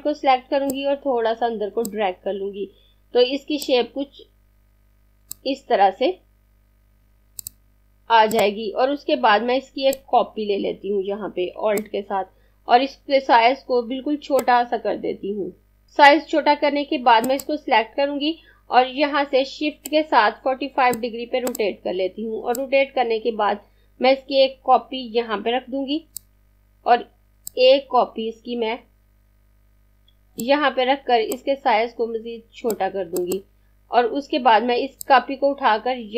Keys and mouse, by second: 13.7 click, 19.7 click, 21.3 click, 27.1 click, 31.0 click.